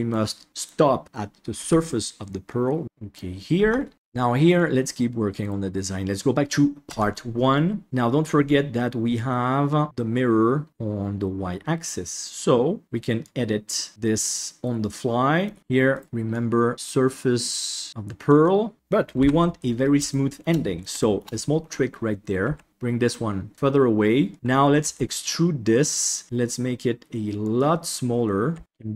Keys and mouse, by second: 0.5 middle click, 1.5 g, 2.8 middle click, 3.6 Tab, 3.9 middle click, 5.4 right click, 6.9 Tab, 7.5 middle click, 8.2-12.8 drag, 13.2 click, 13.9-15.4 middle drag, 15.9 right click, 16.3-17.9 drag, 17.9 middle click, 19.1 KP_3, 20.0 shift+middle click, 20.9 shift+middle click, 22.4 g, 24.9 e, 26.2 s, 28.5 g, 28.6 KP_Decimal.